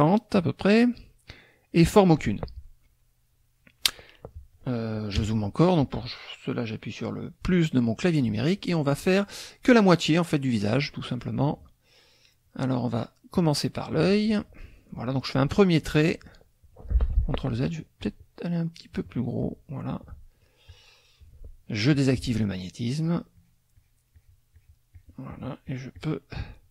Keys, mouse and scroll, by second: 5.2 KP_Add, 7.9 click, 13.3 click, 17.1 ctrl+z, 18.0-19.6 drag, 20.6 shift+click, 21.9 click, 22.9 shift+click, 23.3 shift+click, 24.5-26.2 shift+drag.